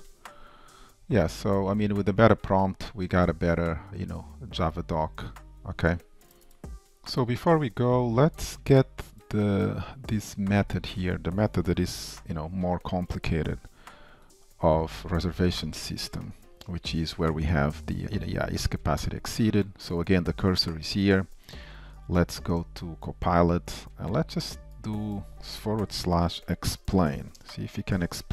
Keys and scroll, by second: 12.0 shift+super+F12, 14.9 ctrl+shift+Down, 21.7 shift+super+a.